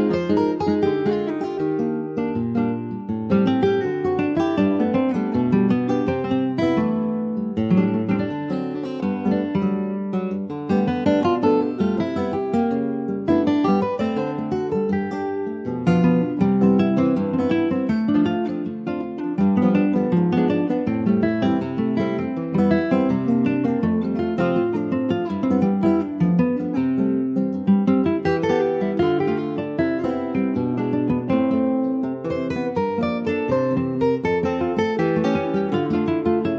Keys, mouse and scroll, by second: 0.2 Tab, 0.8 ctrl+a, 1.7 middle click, 2.1 click, 2.7 shift+middle click, 3.1 click, 3.2-5.4 right drag, 5.4 ctrl+z, 5.8-8.9 right drag, 8.9 click, 9.9 middle click, 10.3 Tab, 10.9 click, 11.4 shift+middle click, 12.2 ctrl+b, 23.9-26.1 middle drag, 26.1 Tab, 26.5 middle click, 26.9 Tab, 27.5 Tab, 27.7 click, 27.9-29.1 right drag, 29.2-32.3 drag, 32.5 scroll down 2, 32.7 middle click, 33.3 ctrl+s, 33.6 shift+middle click, 33.7 shift+scroll up 2, 34.0 click, 34.3 shift+middle click, 34.6-35.6 shift+scroll up 3, 34.8 middle click, 35.3 shift+middle click, 35.6-36.5 middle drag.